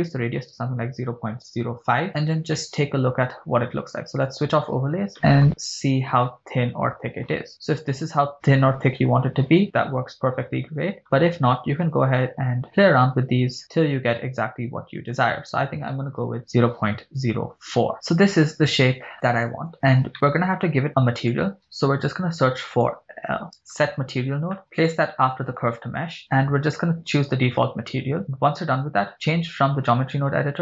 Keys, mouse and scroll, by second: 2.1-2.6 shift+scroll down 1, 2.6-3.2 shift+middle drag, 4.3 click, 5.1 middle click, 5.5 scroll up 5, 6.2 scroll down 2, 8.9 click, 9.8-13.3 drag, 13.6-16.9 drag, 17.8 scroll down 6, 17.9-18.7 shift+middle drag, 18.7-19.2 scroll down 2, 20.1 middle click, 20.9 click, 21.9 shift+a, 26.2-27.8 drag, 28.9-30.6 drag.